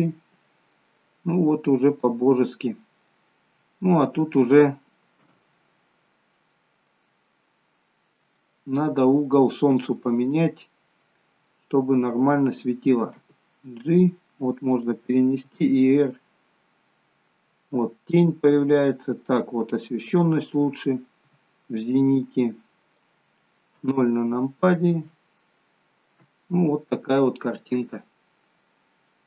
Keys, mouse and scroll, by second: 3.1-4.9 scroll down 3, 5.2 KP_0, 6.9 middle click, 6.9-7.3 scroll up 4, 8.8 middle click, 8.8 scroll up 1, 9.9 scroll up 2, 10.2 middle click, 11.4-12.1 scroll down 2, 13.1 scroll down 1, 13.2 g, 15.4 r, 21.3 r, 23.8 KP_0, 25.2-26.1 scroll up 5.